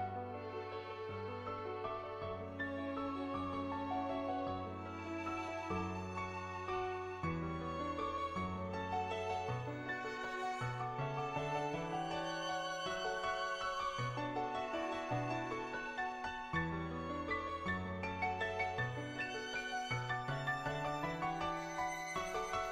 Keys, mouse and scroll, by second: 1.5 click, 2.5 middle click, 3.6 ctrl+z, 4.7-7.4 drag, 6.2 KP_0, 7.9 click, 8.8 middle click, 9.9 click, 10.6 ctrl+z, 10.9 click, 11.6 click, 13.3-14.5 typing, 13.7 click, 14.1 ctrl+z, 14.6 click, 15.1 ctrl+z, 16.0-18.3 drag, 19.2 click, 20.2-22.7 drag.